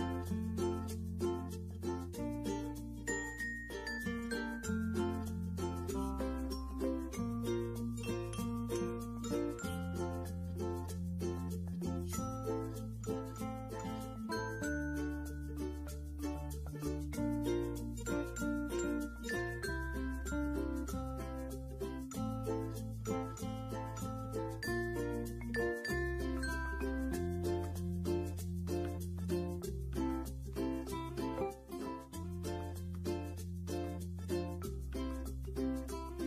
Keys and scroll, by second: 35.5 ctrl+shift+g.